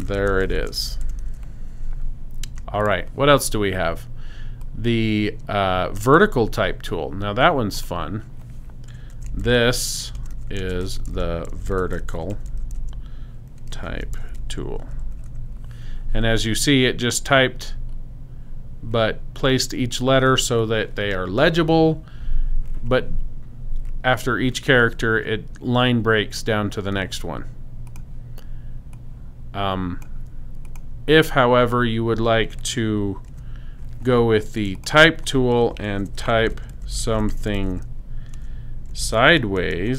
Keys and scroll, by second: 0.0-1.8 typing, 8.9-16.3 typing, 33.3 t, 35.7-39.9 typing.